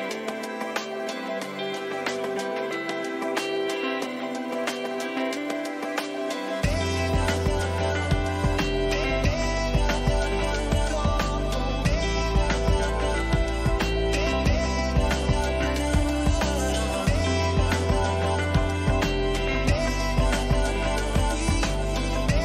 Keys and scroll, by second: 9.0 ctrl+-, 10.0 ctrl++, 13.9 ctrl++.